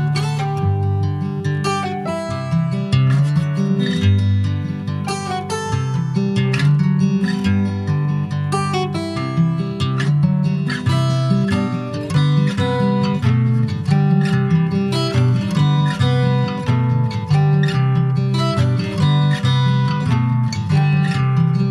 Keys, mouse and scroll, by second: 0.0-4.4 middle drag, 4.4 ctrl+s, 4.7 middle click, 5.1 click, 5.4 Tab, 6.2 Tab, 6.5-11.3 middle drag, 11.3 click, 12.6-14.7 middle drag, 14.7 Tab, 15.0 click, 15.6 middle click, 16.5 click, 18.2-20.9 middle drag, 20.9 ctrl+r.